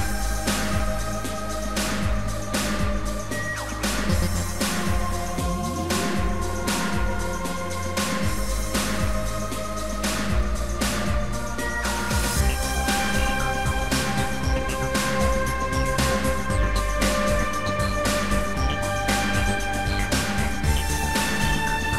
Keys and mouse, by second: 3.8 click, 8.0 click, 9.9 click, 10.8 shift+click, 12.6 shift+click, 14.1 shift+click, 15.1 shift+click, 21.4 shift+click.